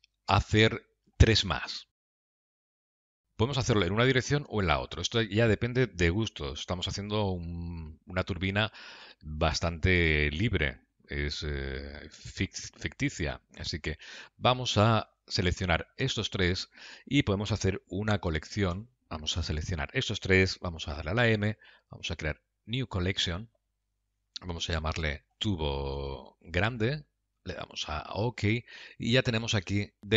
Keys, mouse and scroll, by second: 5.2 middle click, 7.9 scroll down 2, 8.6 middle click, 13.4 Tab, 15.4 shift+click, 19.0 ctrl+z, 21.2 m, 29.7-30.0 scroll down 2.